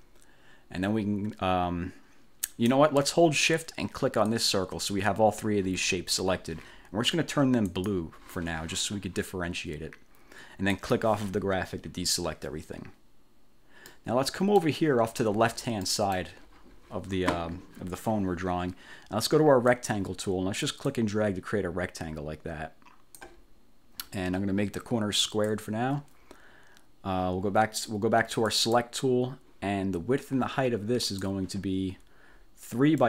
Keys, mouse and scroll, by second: 4.4 shift+click, 7.8 click, 10.8 click, 14.0 middle click, 14.6 click, 15.9 click, 19.8 click, 20.9-23.5 drag, 25.3 click, 28.6 click, 31.2 click.